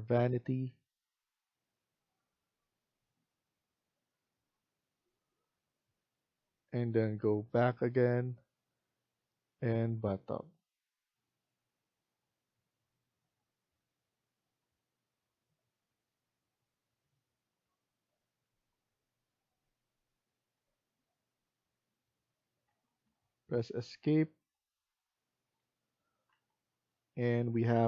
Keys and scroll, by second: 22.6 Escape, 22.9 Escape, 26.2 Escape.